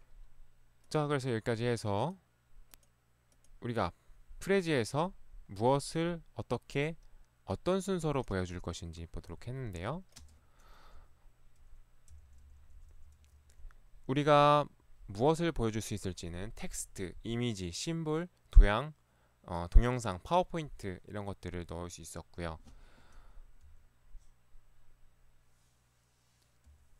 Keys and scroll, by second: 10.2 space, 11.0 Right, 12.2 Left, 13.3 Left, 23.7 Right, 26.7 Right.